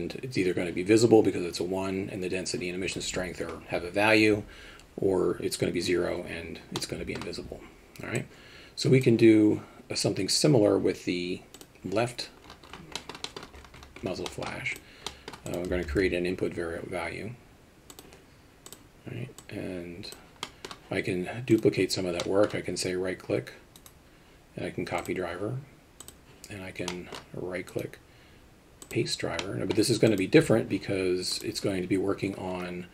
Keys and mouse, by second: 6.9 middle click, 8.3 click, 13.1 middle click, 13.4 middle drag, 14.4 middle click, 15.2 middle drag, 15.5 click, 15.9 shift+a, 19.6 click, 20.5 middle click, 21.6 click, 22.2 middle click, 23.8-25.1 right drag, 26.1 click, 27.1 middle click, 27.8-29.0 right drag, 29.6 middle click, 30.2 click, 31.4 click.